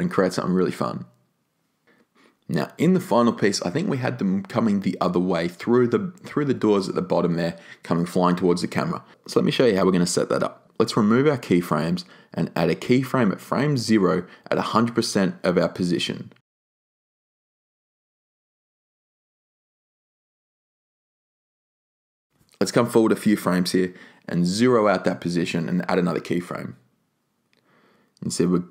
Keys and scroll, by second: 13.1 BackSpace, 17.7-18.6 typing, 24.1 0, 24.5 Return.